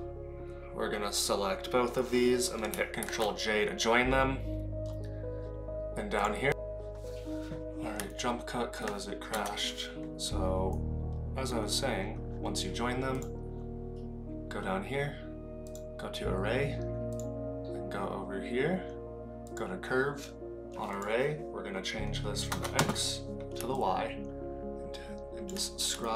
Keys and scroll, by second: 3.0 ctrl+j, 9.3 KP_0.